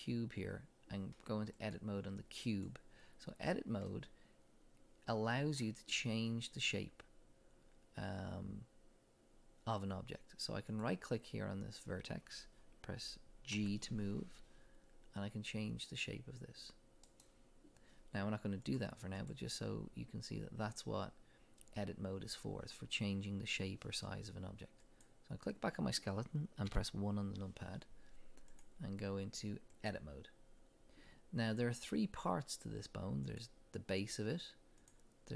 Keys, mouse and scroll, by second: 1.6-3.9 drag, 3.9-10.7 middle drag, 10.7 click, 13.5 g, 17.2 right click, 18.6-25.0 drag, 26.7 KP_1, 28.5-33.4 drag, 34.8 click.